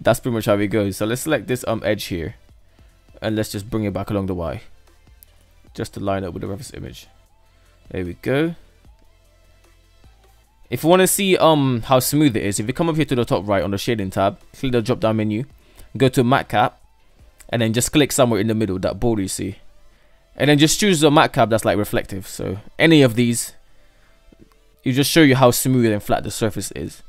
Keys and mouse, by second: 0.0 Tab, 2.1 g, 4.4 Tab, 5.1 Tab, 6.4-8.1 middle drag, 8.3 Tab, 8.4 ctrl+s, 8.6 shift+middle click, 9.0-9.5 middle drag, 13.8-22.1 drag, 22.5-25.3 middle drag, 26.1-27.0 drag.